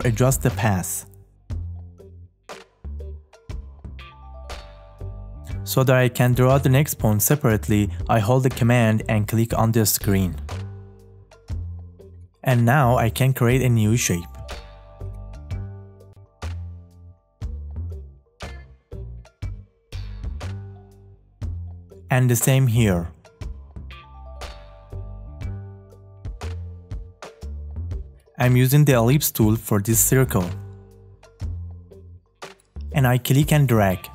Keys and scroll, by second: 17.3 space.